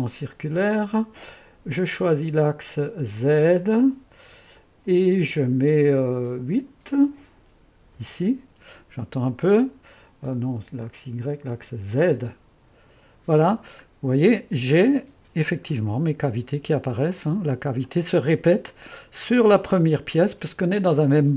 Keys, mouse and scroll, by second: 2.0-8.0 drag, 8.0 8, 10.9-13.9 drag, 14.0-14.6 scroll up 1, 14.6 click, 14.9-16.2 middle drag, 16.2 click, 16.6 middle click, 17.9-19.0 middle drag.